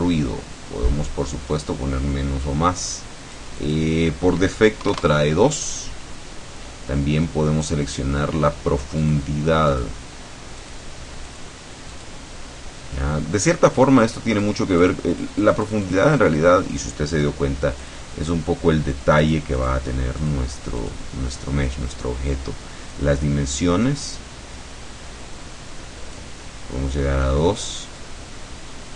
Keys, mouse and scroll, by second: 4.9 KP_2, 9.1 click, 9.8 click, 10.7 click, 11.4 click, 12.0 click, 14.5 click, 14.9 click, 17.2 click, 17.9 click, 19.3 click, 20.2 click, 20.8 click, 21.8-23.7 scroll down 1, 23.7-26.4 drag, 26.5 middle click, 28.0-28.9 drag.